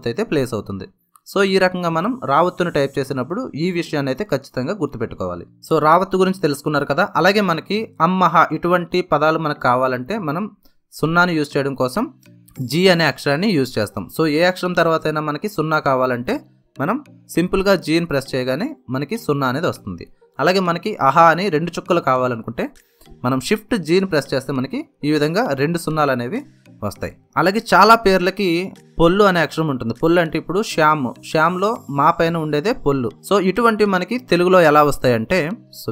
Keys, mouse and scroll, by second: 10.0 space, 10.2 ctrl+a, 12.2 Right, 12.3 Return, 12.6 q, 15.5 g, 18.2 space, 20.2 q, 22.6 q, 24.0 shift+g, 28.1 Return, 32.0 Return.